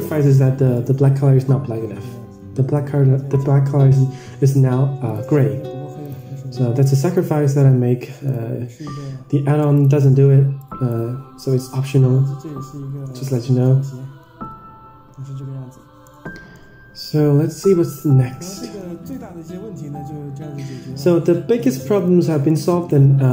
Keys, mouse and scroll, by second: 0.3 click, 0.9-3.1 middle drag, 3.3 KP_0, 5.1 click, 5.9 click, 8.1 click, 9.6 click, 11.7 drag, 13.1 ctrl+s, 14.4 a, 14.7 a, 16.3 middle click, 16.8-17.4 scroll down 5, 17.5 middle click, 18.3-18.7 scroll up 4, 18.7 middle click, 20.9 click, 22.4 Tab, 22.4-22.8 middle drag, 22.8-23.1 scroll down 4, 23.2 middle click.